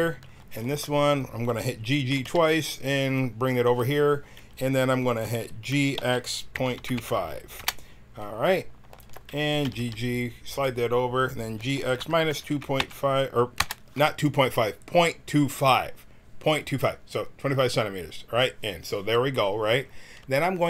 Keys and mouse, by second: 0.6-2.2 drag, 2.1 g, 5.7 g, 9.0 click, 9.6 g, 11.5 g, 20.4-20.6 middle drag.